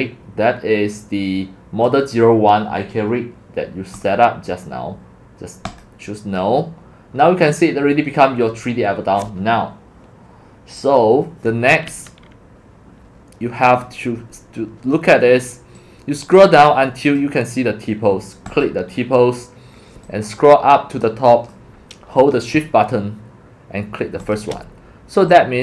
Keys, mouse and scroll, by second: 3.9 click, 4.6 click, 5.7 click, 6.3 click, 7.2-7.6 scroll, 15.7-17.2 drag, 18.5 click, 20.1-21.5 drag, 24.2 shift+click, 25.3-25.6 drag.